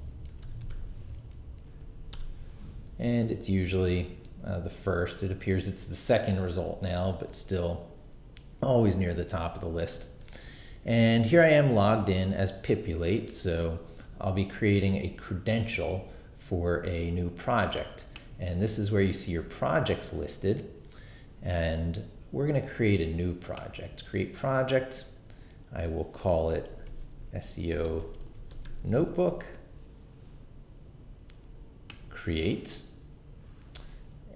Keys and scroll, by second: 0.0-1.2 typing, 1.8 Down, 2.1 Return, 8.9 super+w, 26.4-29.5 typing.